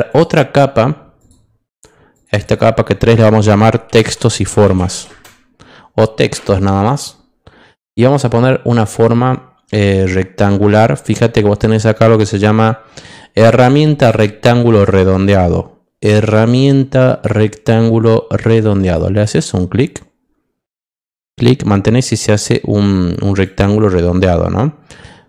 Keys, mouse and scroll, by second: 0.0 click, 1.1 click, 2.1 click, 3.9 t, 4.3 x, 4.9 s, 5.0 space, 6.8 click, 8.9 click, 18.8 click, 21.1-23.4 drag.